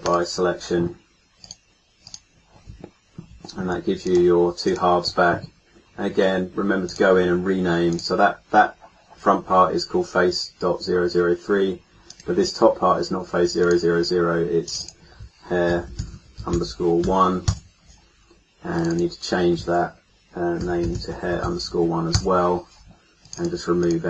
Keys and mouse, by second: 4.0-6.8 middle drag, 13.6 middle click, 16.6-18.7 middle drag.